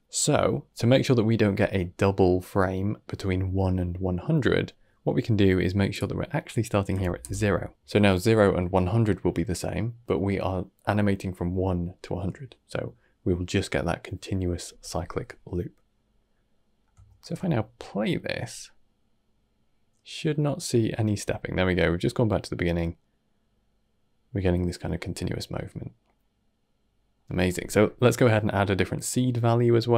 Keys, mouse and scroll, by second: 5.8-7.7 drag, 15.9 scroll down 2, 16.2 middle click, 17.1 shift+space, 22.1-25.2 middle drag, 26.2-27.5 middle drag, 27.5 scroll down 1, 27.7-29.6 middle drag, 29.6 scroll up 1, 29.8 middle click.